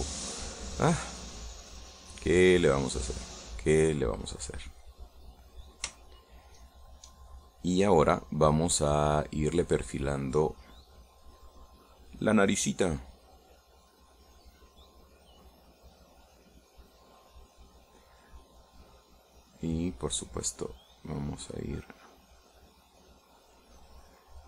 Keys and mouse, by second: 1.3 middle click, 2.1-4.5 drag, 4.9 click, 5.5 click, 6.2 middle click, 7.1-8.1 shift+middle drag, 9.3 click, 11.2-17.9 drag, 20.5-21.7 drag, 22.0 click, 23.0-24.4 drag.